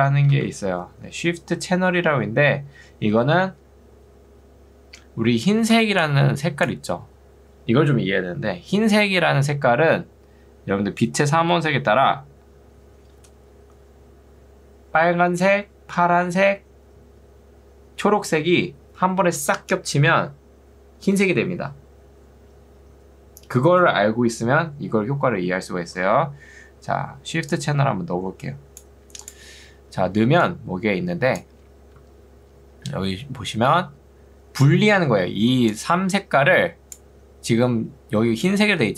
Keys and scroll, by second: 0.0-0.5 typing, 5.7 ctrl+2, 26.9 Escape, 30.1 ctrl+2, 32.1 Escape, 35.5 ctrl+2.